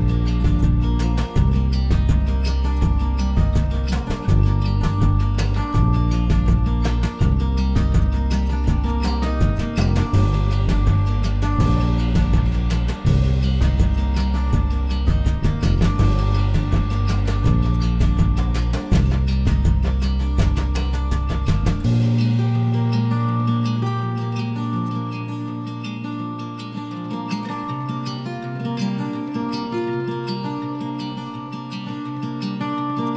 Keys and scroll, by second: 7.7 s, 11.6 m.